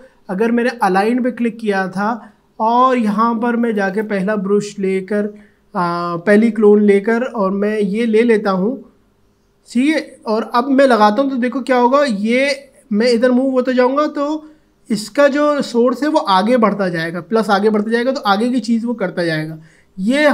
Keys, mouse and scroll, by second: 0.6 click, 3.9 click, 8.5-20.3 alt+drag.